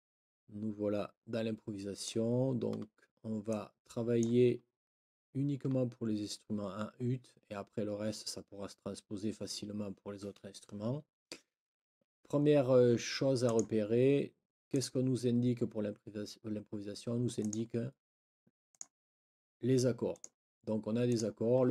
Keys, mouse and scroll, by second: 0.0 click, 0.1-0.6 scroll up 3, 0.1 click, 0.4 click, 0.6 click, 1.3-1.7 scroll up 1, 1.7 click, 3.5 click, 13.4 click, 14.7 click, 17.4 click, 18.7 click, 20.1 click, 21.1 click.